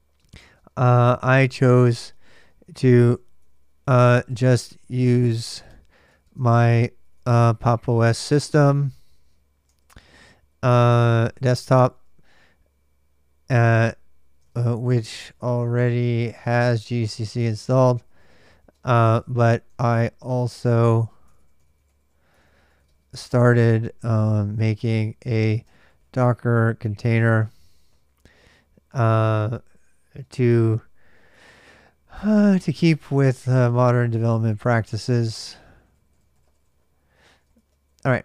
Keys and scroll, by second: 0.0-12.2 typing, 13.3-30.7 typing, 31.9-38.2 typing.